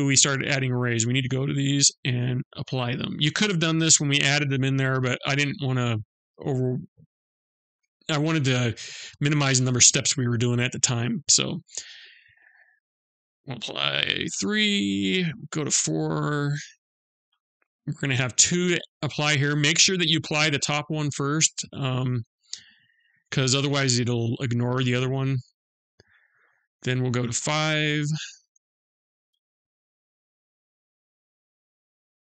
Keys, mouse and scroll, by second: 0.8 click, 2.0 click, 4.1 middle click, 5.4 middle click, 10.8 click, 12.9 click, 14.6 middle click, 17.7 click, 21.3 click, 25.9 middle click, 27.5 click, 28.6 click.